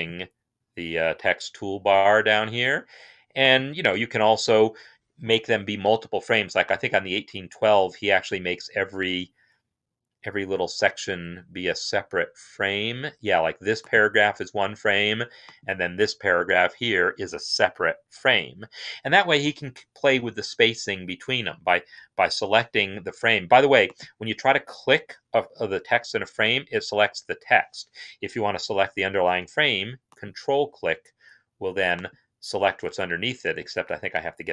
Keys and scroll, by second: 3.8 Return, 33.5 Escape.